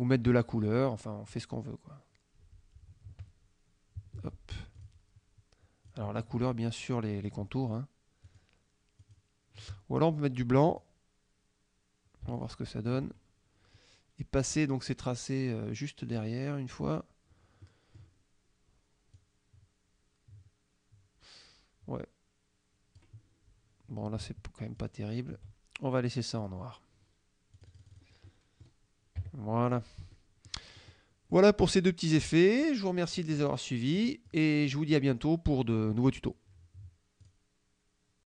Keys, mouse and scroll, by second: 0.5 click, 1.4 click, 3.3 ctrl+z, 4.1 ctrl+z, 4.8 shift+click, 5.9 shift+click, 8.3 shift+click, 9.1 shift+click, 10.8 click, 12.4 shift+click, 16.8 click, 17.7 middle click, 19.2-23.2 drag, 24.8 shift+click, 26.5 click, 27.6 click, 28.4 click, 29.2 KP_Subtract, 30.2 click, 30.8 click, 31.4 click, 33.5 click, 34.0 click, 35.0-36.1 drag, 37.3 click, 38.3 click.